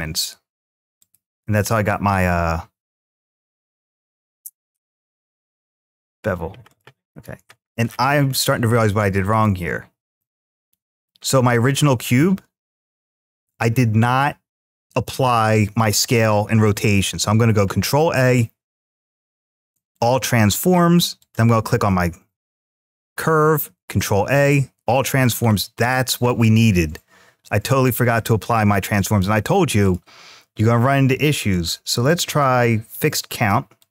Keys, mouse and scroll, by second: 0.8 click, 1.4 click, 3.1 Tab, 3.6 click, 4.5 x, 7.3 scroll up 2, 7.7-8.3 scroll down 1, 8.3 middle click, 8.3 scroll down 1, 8.5 scroll up 1, 9.1 click, 10.0-10.9 middle drag, 21.0 click, 23.4 ctrl+a, 25.0-25.4 scroll down 3, 28.2 click, 29.6 click, 31.3-32.8 drag, 33.6-33.9 drag.